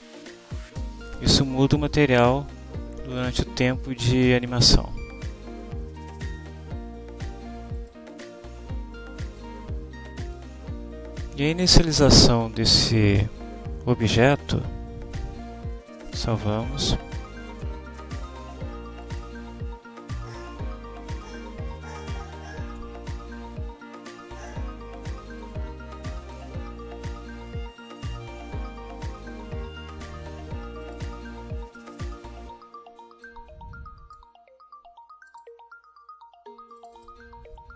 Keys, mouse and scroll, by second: 3.2 click, 7.8 click, 9.3 click, 10.3 click, 16.2 ctrl+s, 19.1 click, 20.3 scroll up 2, 21.2 click, 24.4 click, 25.4 click, 26.4 click, 31.0 click, 33.3-34.4 drag, 35.4 click, 36.9 click.